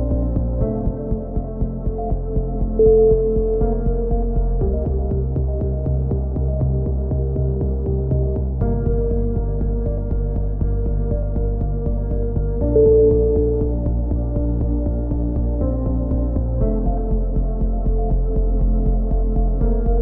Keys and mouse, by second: 0.1-3.9 middle drag, 3.9-6.1 right drag, 5.7 click, 6.3 right click, 7.3-8.5 right drag, 8.4 click, 8.5 middle click, 9.4-10.6 shift+right drag, 10.6 KP_7, 13.0 s, 15.9 b, 17.7 s, 19.0 click, 19.1 a, 19.4 z, 19.9 z.